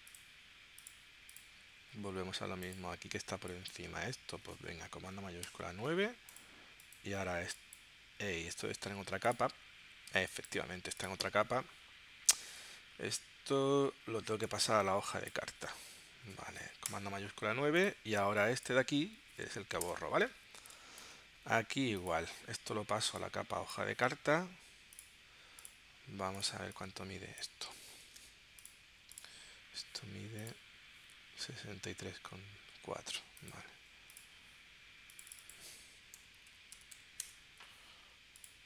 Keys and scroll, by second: 4.3 super+z, 5.4 shift+super+9, 8.8 super+z, 10.1 space, 16.8 shift+super+9, 19.8 BackSpace, 20.3 space, 28.0 super+g, 35.9-37.4 typing.